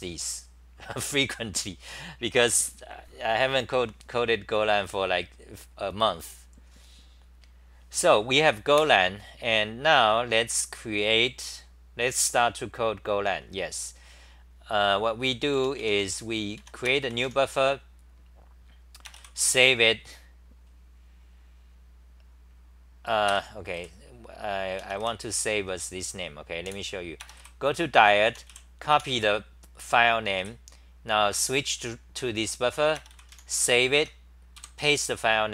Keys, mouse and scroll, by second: 8.7 super+w, 15.6 o, 15.8 o, 16.0 o, 16.6 4, 23.3 ctrl+g, 23.7 w, 26.7 super+w, 28.0-29.0 typing, 30.4 w, 34.0 End, 34.6 k.